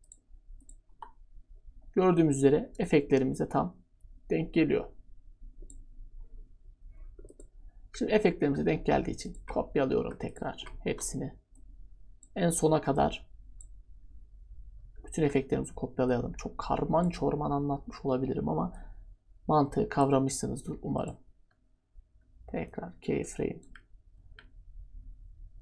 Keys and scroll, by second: 10.8 ctrl+d.